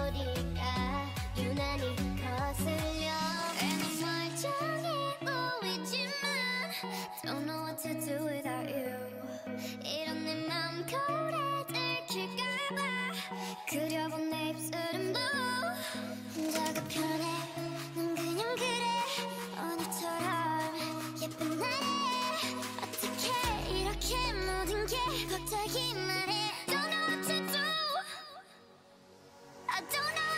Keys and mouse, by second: 1.7 ctrl+Tab, 3.1-4.9 drag, 3.5 alt+m, 5.8-8.1 drag, 6.6 alt+m, 8.6-12.1 drag, 8.9 alt+m, 14.4 ctrl+Tab, 15.2-17.1 drag, 15.7 alt+m, 17.2 ctrl+z, 17.7 alt+m, 18.6-20.4 drag, 19.2 alt+m, 22.4 alt+m, 25.7 shift+e, 27.6 a, 28.0-30.0 drag, 28.4 alt+m, 30.0 alt+m.